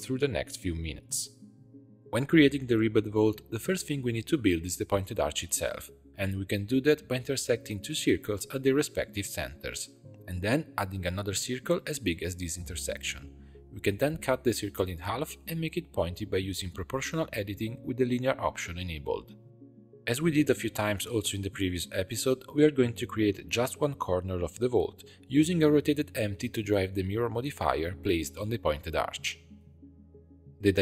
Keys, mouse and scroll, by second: 0.3 click, 2.0-2.9 scroll down 3, 2.9 click, 3.3 shift+d, 4.3 click, 5.9 a, 6.7 click, 7.9 click, 8.9-10.9 drag, 10.9 s, 12.2 click, 12.7 b, 14.1 x, 15.0 click, 15.3 click, 15.7-17.4 drag, 17.4 g, 20.0 click, 20.5 g, 21.5 Tab, 21.7 click, 21.9 shift+a, 23.4 r, 24.2 click, 25.0 click, 25.5-26.9 drag, 28.2 click, 28.4 Tab, 28.9 g, 29.9 Tab, 30.7 r.